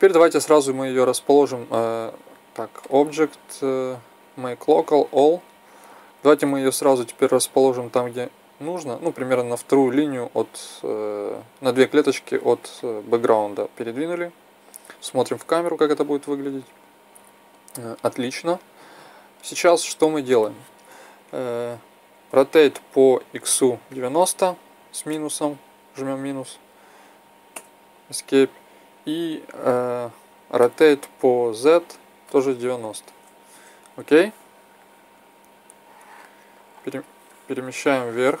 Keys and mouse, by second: 2.8-5.0 drag, 6.0-7.0 right drag, 7.0-7.8 middle drag, 7.8-10.6 drag, 12.7-15.4 drag, 15.4 KP_0, 22.2 r, 30.5 r, 35.6-37.6 drag, 37.8-38.4 middle drag.